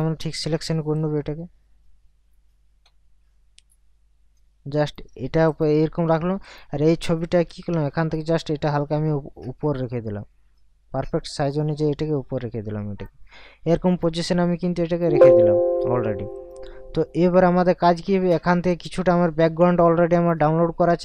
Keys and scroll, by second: 7.5 ctrl+t.